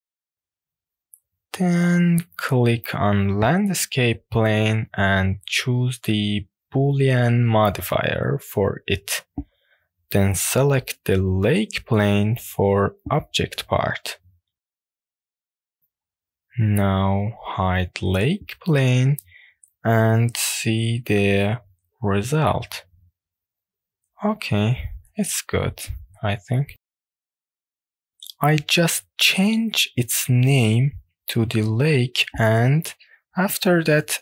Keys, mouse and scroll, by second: 0.4 drag, 0.8 click, 3.2-3.9 drag, 6.3 click, 7.0-7.3 scroll down 2, 7.5-7.9 shift+middle drag, 8.0 scroll up 2, 8.3-8.8 middle drag, 10.5 click, 11.4 click, 14.6 click, 15.4 click, 15.7 right click, 16.0 click, 18.0 click, 19.5-23.0 middle drag, 24.0 drag, 24.9 click, 25.1-31.3 drag, 32.7 click, 33.5 click.